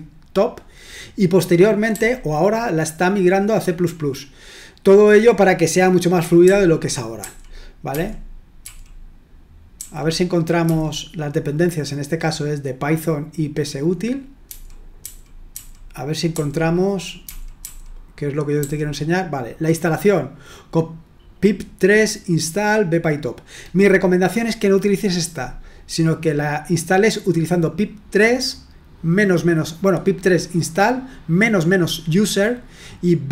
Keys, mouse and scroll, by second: 1.9 d, 6.4-8.6 typing, 9.7-10.8 typing, 14.5-16.3 typing, 17.6 d, 18.6 k.